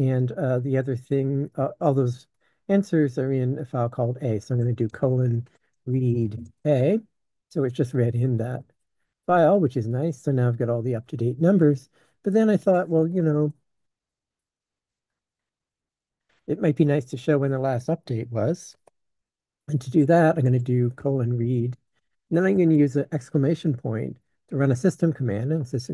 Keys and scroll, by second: 4.8-8.0 typing, 8.7 ctrl+f, 9.3-16.4 typing, 18.7 Escape, 20.4-22.5 typing.